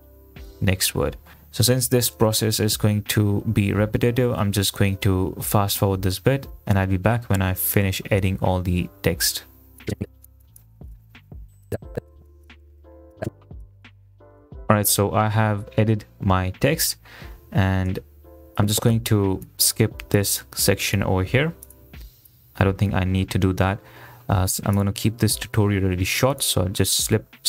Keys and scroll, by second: 0.0-1.5 typing, 9.9 space, 10.9-14.7 typing.